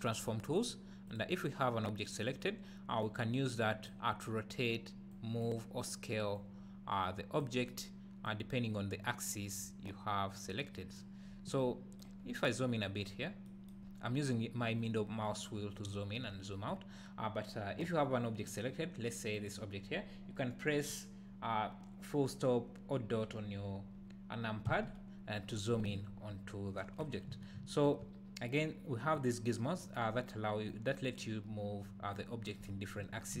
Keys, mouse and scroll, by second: 0.1 click, 1.0 click, 3.0-19.5 drag, 11.2-11.5 scroll up 2, 12.1-12.5 scroll up 2, 13.1 scroll down 2, 13.9-14.6 scroll up 2, 14.6-15.0 scroll down 2, 15.0-15.3 scroll up 2, 15.3 scroll down 2, 15.5 scroll up 2, 15.8-16.1 scroll down 2, 16.1 scroll up 2, 16.4 scroll down 1, 16.7-17.0 scroll up 2, 17.0-19.3 scroll down 2, 24.7 KP_Decimal, 26.3-27.6 scroll down 2, 27.6 `, 29.1-33.4 drag.